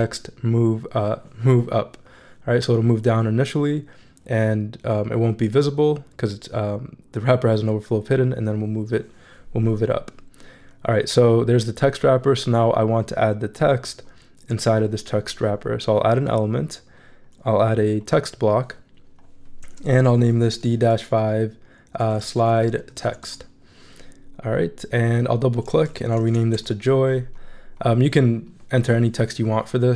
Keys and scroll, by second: 19.9-23.5 typing, 25.9 super+a, 26.2-27.0 typing.